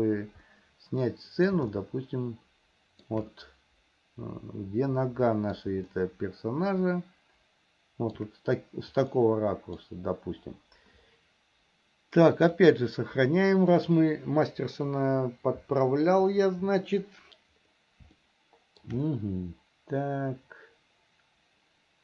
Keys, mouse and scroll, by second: 1.3 middle click, 2.0-3.4 shift+middle drag, 3.6-6.0 middle drag, 6.2-8.4 shift+middle drag, 9.4 middle click, 12.8-15.1 drag, 18.4 shift+middle click, 19.4-22.0 middle drag.